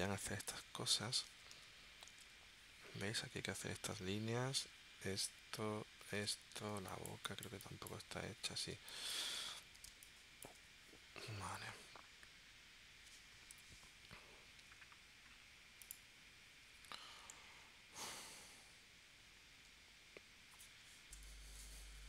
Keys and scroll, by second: 0.1 space, 1.5 super+Tab, 6.3 super+Tab, 6.8 space, 8.7 space, 9.9 space, 13.5 p, 21.1 shift+super+p.